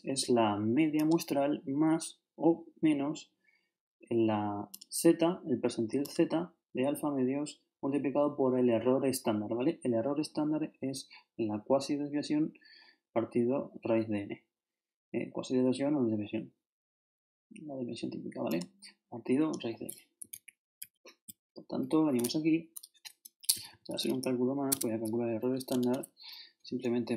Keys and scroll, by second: 20.3 ctrl+shift+Left, 22.1 ctrl+shift+Left, 23.5 shift+e, 23.9 shift+space, 24.7 shift+Tab.